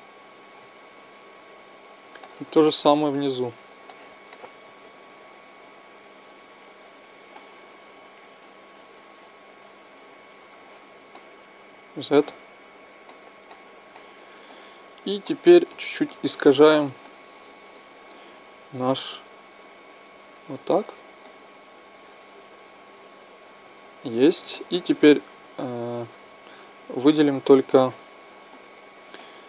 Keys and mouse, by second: 3.0-6.6 middle drag, 6.6-11.7 right drag, 7.3-9.3 middle drag, 10.7-12.2 middle drag, 11.7 z, 18.9-21.2 drag, 21.2-23.0 middle drag, 24.5-27.0 middle drag, 27.0-28.7 right drag, 27.7-29.4 middle drag.